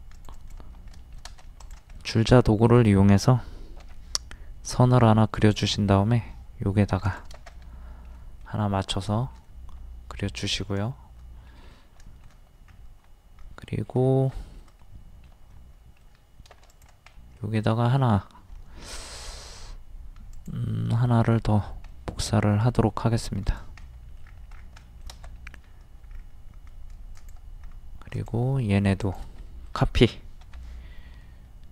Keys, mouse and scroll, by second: 0.2 click, 1.0 shift+middle click, 3.8 m, 5.4 ctrl+click, 7.5 middle click, 8.3 scroll up 1, 8.4 middle click, 9.5-10.8 middle drag, 10.9 shift+middle click, 12.7-13.0 scroll up 1, 14.1 scroll down 1, 14.6-16.6 shift+middle drag, 16.6 space, 16.7 click, 17.2 middle click, 17.6-18.2 scroll up 1, 18.9 m, 19.3 scroll up 1, 20.3 ctrl+click, 21.9 middle click, 23.5 click, 23.8 middle click, 24.2-24.5 scroll down 1, 24.8 shift+middle click, 26.2-26.5 scroll up 1, 27.1 click, 27.6-28.0 scroll up 1, 28.1 shift+click, 29.5-30.6 middle drag.